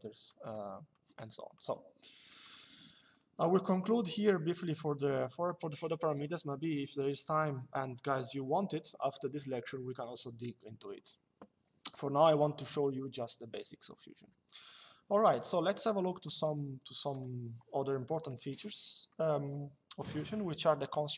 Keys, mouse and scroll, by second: 0.0 click, 2.2 click, 6.9 Delete, 15.9 click, 17.8 Escape, 18.3 middle click.